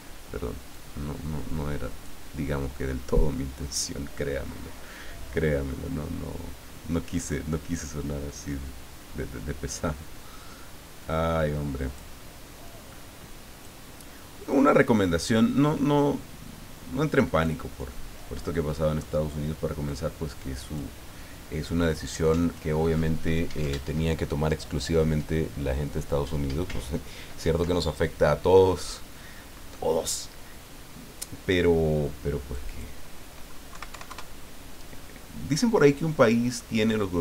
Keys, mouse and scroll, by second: 0.7-2.3 drag, 7.8-12.3 drag, 12.7 click, 14.5-17.8 drag, 18.5 middle click, 19.8 click, 32.5 click, 33.7 KP_Decimal, 33.9 KP_5, 34.0 KP_Enter, 36.6-37.2 drag.